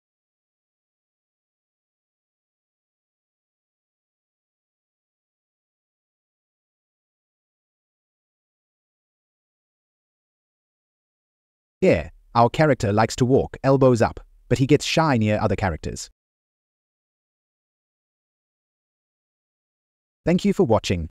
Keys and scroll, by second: 1.4 Right, 2.2 Up, 5.6 Left, 10.7 Left, 12.0 Down, 16.6 Down, 19.2 Right.